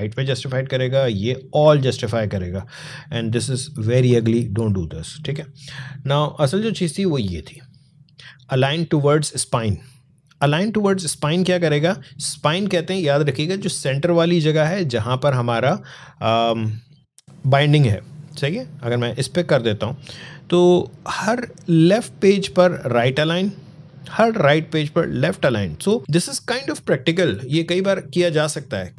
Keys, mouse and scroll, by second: 2.8 scroll down 1, 6.0 click, 19.1 click, 24.4 alt+scroll up 1, 25.6-25.9 alt+scroll down 1.